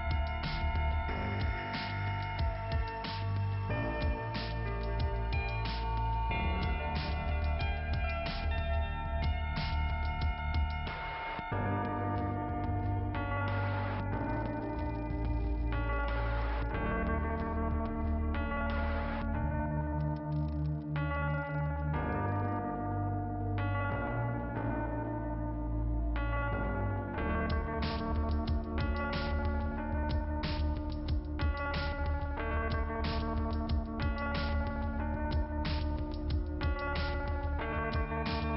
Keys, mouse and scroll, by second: 0.3 scroll down 1, 1.4 click, 4.6 click, 5.2 click, 8.0-9.6 scroll up 1, 10.0 click, 12.1 click, 14.2 click, 20.0 click, 25.8 click, 29.3 click, 30.7 click, 30.8 click, 31.8 click, 32.3 click, 32.9 click, 34.3 right click, 35.1 click, 36.1 click.